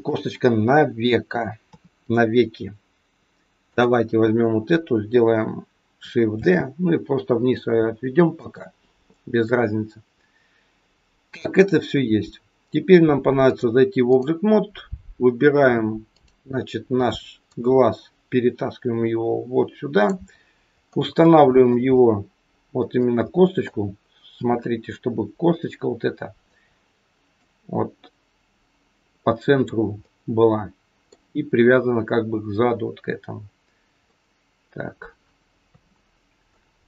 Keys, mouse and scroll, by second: 1.6 KP_3, 3.7 click, 6.3 shift+d, 13.5 click, 16.1 click, 20.4 scroll up 4, 21.1 shift+middle click, 21.9 middle click, 24.3 KP_7, 27.4 click, 29.9 middle click, 34.1 middle click, 35.6 KP_3, 36.0-36.8 scroll down 4.